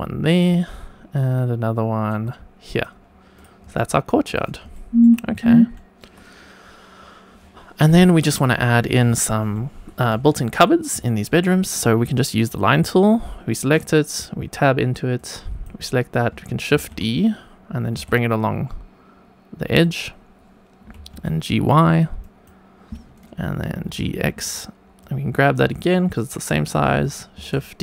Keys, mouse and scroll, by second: 0.2 click, 0.7 shift+right click, 2.7 click, 3.3 drag, 3.7-4.2 shift+middle drag, 4.4 scroll down 2, 4.7 shift+middle drag, 5.2 scroll up 1, 5.7 shift+middle click, 6.9-7.6 scroll up 2, 7.9 shift+middle drag, 9.2-9.5 shift+middle drag, 10.2 shift+middle drag, 11.0 shift+middle click, 12.4 click, 13.7 Tab, 15.1 click, 16.7 shift+d, 17.9 y, 19.7 click, 20.9 g, 21.1 y, 21.7 click, 23.7 g, 23.8 x, 24.4 click, 24.9 click, 25.9 shift+middle click, 27.3 shift+d.